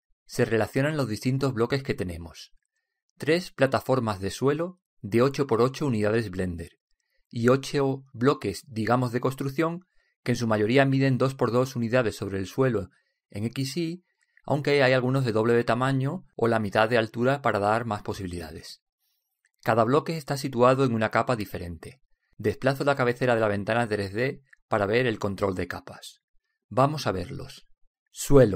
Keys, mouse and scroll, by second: 25.1-27.3 middle drag, 27.3 middle click.